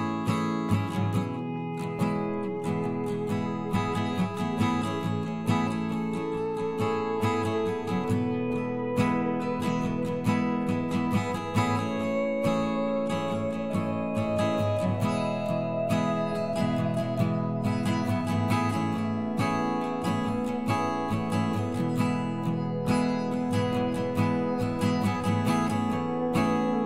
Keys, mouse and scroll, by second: 1.1 middle click, 3.6 middle click, 6.1 right click, 6.8 middle click, 11.6 ctrl+KP_Add, 11.7 ctrl+KP_Add, 13.4 ctrl+KP_Add, 13.6 ctrl+KP_Subtract, 15.9 x, 19.4 right click, 22.3 Delete, 26.6 Delete.